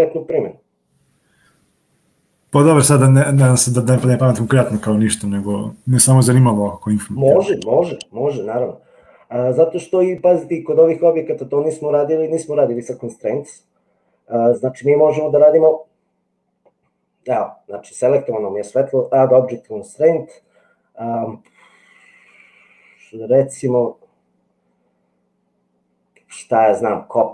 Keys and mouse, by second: 14.9-17.4 drag, 19.4-27.3 drag.